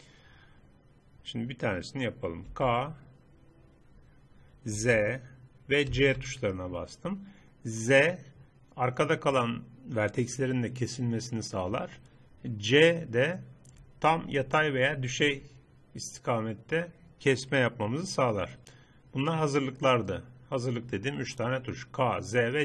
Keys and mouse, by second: 2.5 k.